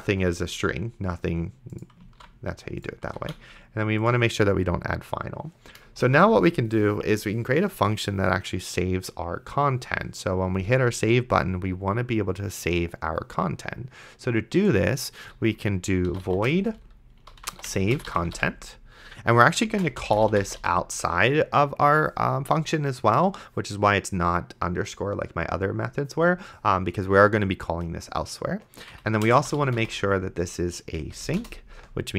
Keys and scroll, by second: 2.4 ctrl+s, 3.4 ctrl+z, 5.9 Return, 15.9-21.1 typing, 29.1-31.0 typing, 31.4 Return.